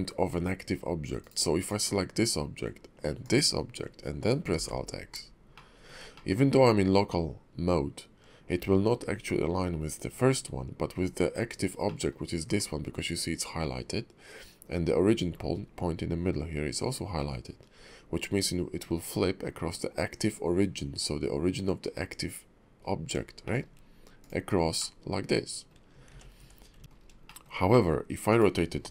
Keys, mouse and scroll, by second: 1.7 click, 3.2 shift+click, 4.5 alt+x, 5.5 shift+middle click, 6.1 middle click, 11.9 middle click, 15.4-17.5 scroll up 6, 17.5-18.8 scroll down 7, 22.9-23.3 scroll up 2, 23.4 shift+middle click, 24.2 click, 24.8 middle click, 26.1 ctrl+z, 26.8 ctrl+z, 26.8 middle click, 26.8 scroll down 2, 27.0 scroll up 1, 27.3 shift+middle click, 27.7 middle click, 28.3 click.